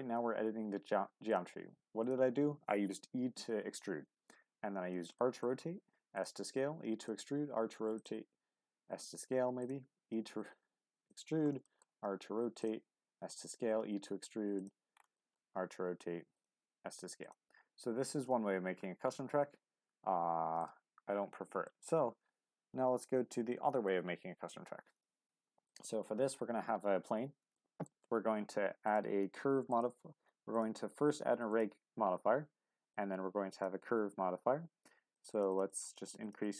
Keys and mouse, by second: 0.0 e, 1.3 click, 1.6 r, 2.0 click, 5.2 shift+middle click, 6.1 click, 6.4 e, 7.0-8.0 drag, 8.9 s, 9.6 click, 10.0 e, 11.1 click, 11.6 shift+middle click, 11.9 r, 12.6 click, 12.9 s, 13.3 click, 13.6 e, 14.6 click, 15.2 shift+middle click, 15.5 r, 16.3 click, 16.6 s, 17.2 click, 18.1 Tab, 19.6 Tab, 20.4 x, 21.6 shift+middle drag, 23.6 shift+a, 27.6 shift+middle click, 28.8-33.6 drag, 35.1-35.6 drag, 35.7 click, 36.0 click, 36.2 click, 36.4-36.5 drag.